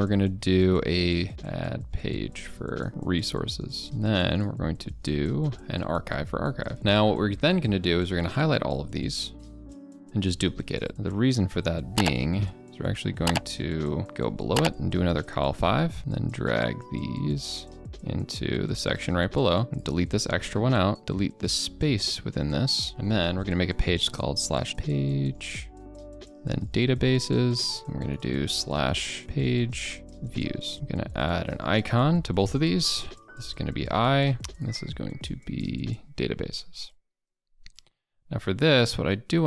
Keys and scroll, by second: 3.8 ctrl+a, 3.8 ctrl+b, 9.5 ctrl+d, 24.7 ctrl+BackSpace, 27.8 ctrl+[.